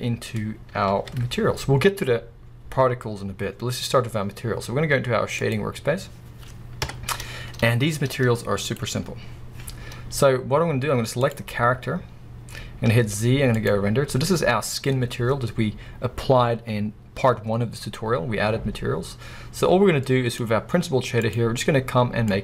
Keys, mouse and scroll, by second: 0.9 ctrl+s, 5.6 click, 6.4 scroll down 1, 6.8 KP_0, 7.5 scroll down 1, 10.3 scroll up 1, 11.3 click, 12.3 scroll down 1, 13.8 z, 22.3 click.